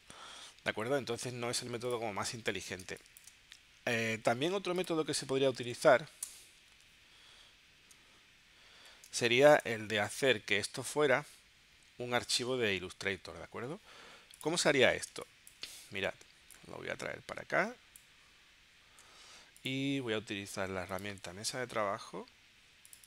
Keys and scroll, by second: 2.9 space, 6.3 BackSpace, 6.7 super+Tab, 9.1 space, 15.1 space.